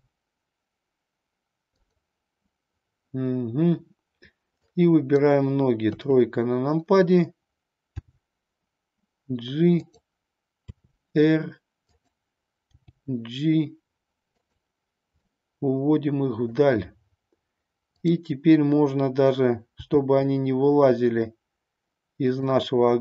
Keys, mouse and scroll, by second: 1.8 click, 4.6-5.2 drag, 5.9 KP_3, 8.0 g, 9.7 click, 10.6 r, 12.6 g, 14.5 click, 15.1-16.6 middle drag, 20.8 g.